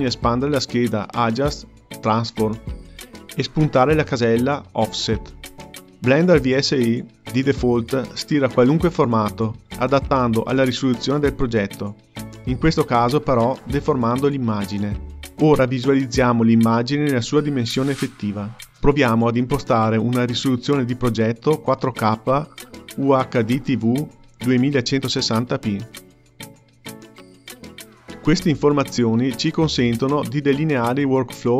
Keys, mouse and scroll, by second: 0.0-0.6 scroll up 3, 0.6 click, 20.0-22.4 drag, 22.4-26.4 scroll down 1, 29.4 click, 30.9 click.